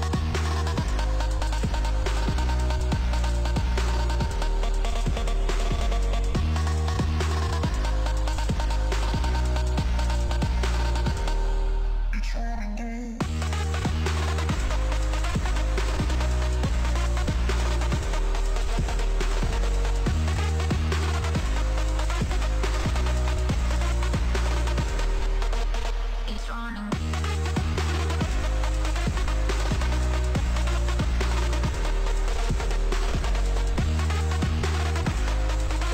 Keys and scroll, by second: 3.2 ctrl+space, 12.0 space, 13.1 ctrl+s, 23.0 ctrl+s.